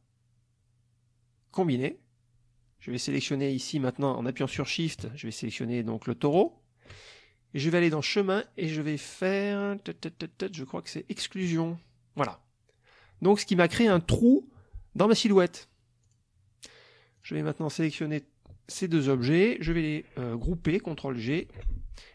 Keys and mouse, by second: 1.8 click, 6.3 shift+click, 7.8 click, 11.4 click, 16.1 click, 17.2 click, 18.7 shift+click, 21.4 ctrl+g.